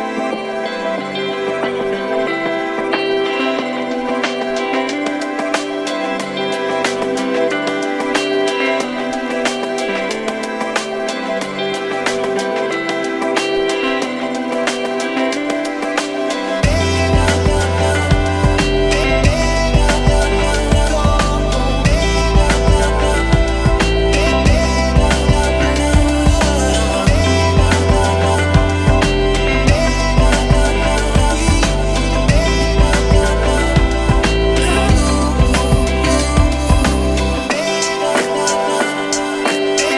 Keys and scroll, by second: 1.9 0, 3.9 2, 4.2 8, 22.6 Escape, 22.9 d, 23.5 Return, 24.2 Return, 24.7 4, 25.3 2, 26.0 2, 29.7 Escape, 30.6 Escape, 33.3 2, 33.6 Return, 35.1 1, 35.2 Return, 36.4 Escape, 37.7-38.6 typing.